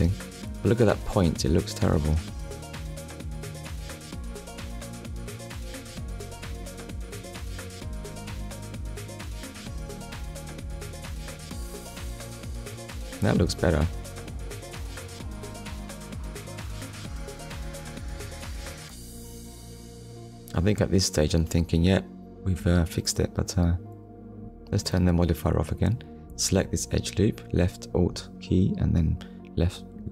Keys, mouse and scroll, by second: 9.6 click, 11.0 click, 12.5 Tab, 12.9 click, 13.4 middle click, 14.4 scroll down 1, 14.9 middle click, 17.4 Tab, 18.0 middle click, 19.0 scroll up 1, 19.7-20.1 scroll up 1, 22.7 click, 23.2 click, 24.9 click, 25.6 middle click, 27.2 alt+click, 28.0 middle click.